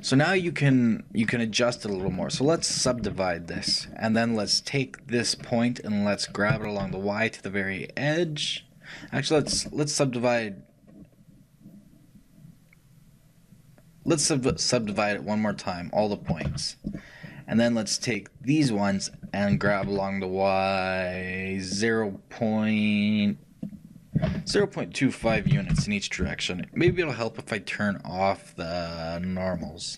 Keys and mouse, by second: 2.6-25.8 shift+right drag, 3.1 shift+w, 16.5 shift+w, 27.0 shift+n.